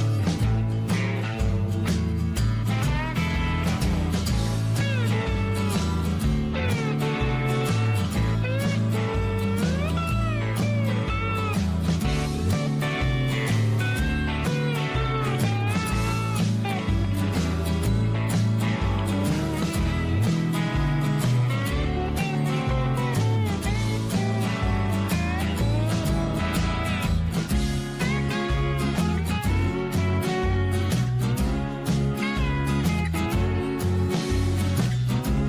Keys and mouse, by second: 1.8 click, 2.1-4.0 drag, 4.2 middle click, 8.3 click, 11.6-13.4 drag, 16.4 shift+middle click, 17.0 middle click, 17.6 click, 21.1 middle click, 22.0 shift+middle click, 23.1 f, 24.3 ctrl+r, 27.0 shift+middle click, 28.6 ctrl+z, 29.0 click, 29.9-31.0 drag, 31.5 click, 32.0-33.1 drag, 34.2-35.4 drag.